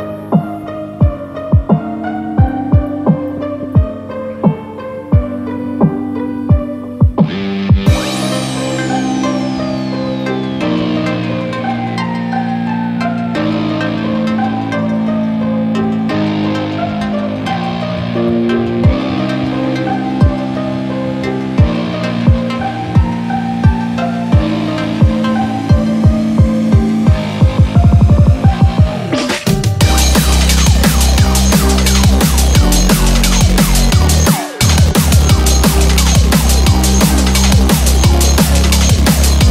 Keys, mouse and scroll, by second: 0.4 middle click, 1.6 scroll up 5, 2.0 middle click, 2.5 click, 4.2 h, 4.6 click, 5.0 middle click, 5.6 shift+a, 12.6 5, 30.1 s, 35.2 scroll up 3, 35.4 scroll down 3, 36.0 shift+middle click, 36.0 middle click, 36.0 shift+click, 36.0 scroll up 2, 36.5 shift+middle click, 36.8 click, 37.1 click, 37.3 shift+click, 38.1 click, 38.3 shift+click, 38.8 click.